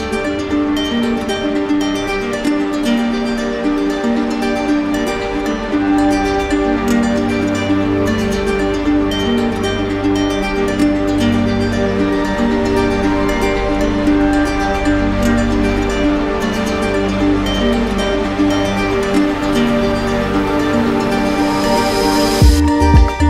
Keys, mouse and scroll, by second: 0.0 right click, 2.0 click, 3.3 right click, 4.7 click, 6.1 click, 6.9 click, 8.5 right click, 9.7 click, 10.7 alt+right click, 10.9 d, 11.1 d, 12.2 d, 14.0 right click, 16.9 click, 18.0 right click, 19.5 alt+right click, 20.6 alt+right click, 22.0 alt+right click, 22.2 alt+click.